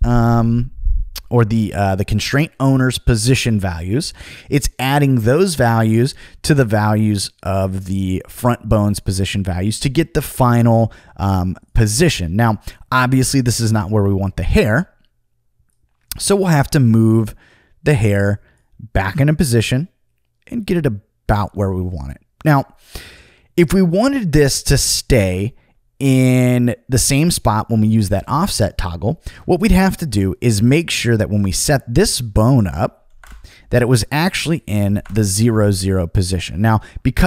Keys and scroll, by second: 33.1 0, 33.2 Return, 34.9 0, 35.0 Return.